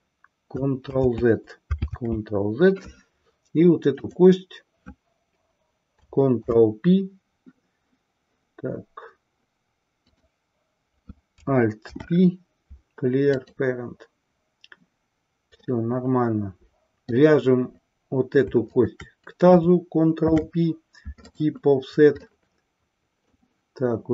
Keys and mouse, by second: 0.9 ctrl+z, 3.9 click, 6.3 ctrl+p, 11.9 alt+p, 15.6-17.3 middle drag, 18.6 shift+click, 20.1 ctrl+p, 22.2-23.6 middle drag.